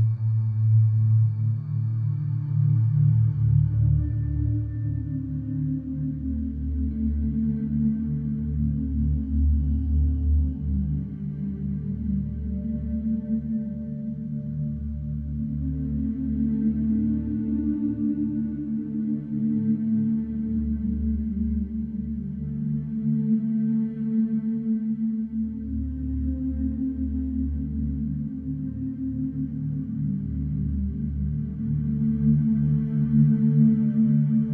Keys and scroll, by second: 0.2 4, 4.2 3, 5.8 4, 14.4 ,, 15.7 F1, 19.4 ctrl+d, 19.6 Escape, 28.1 F1.